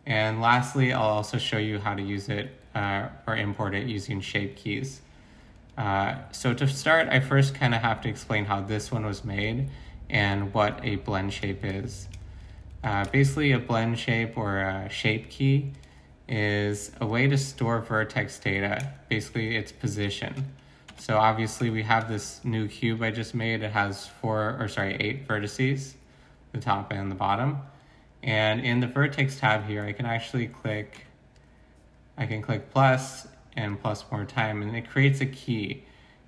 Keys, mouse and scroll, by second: 12.9 a, 16.3 g, 17.4 s, 18.4 s, 20.9 Tab, 30.9 Tab.